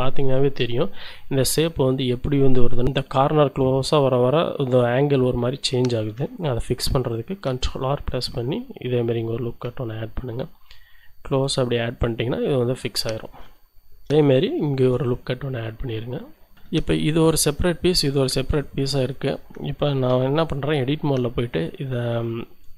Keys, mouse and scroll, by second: 6.6 ctrl+r, 7.1 ctrl+click, 12.0 click, 12.5-13.4 scroll down 2, 13.6 shift+click, 14.0 shift+middle click, 14.7 ctrl+r, 15.0 ctrl+click, 16.5 shift+click, 17.4-18.8 drag, 19.0-20.1 drag, 20.1 Tab, 21.4 click.